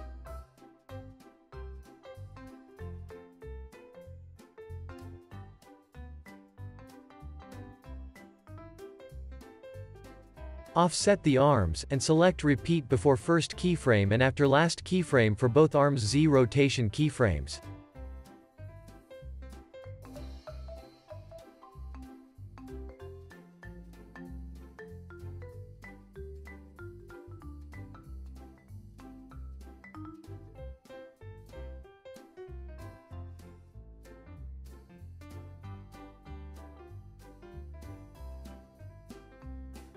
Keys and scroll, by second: 5.2 super+s, 8.9 alt+w, 10.1 super+s, 14.6 alt+w, 27.8 super+s, 28.2 space, 30.6 space, 35.1 alt+q, 35.9 alt+w, 36.9 space.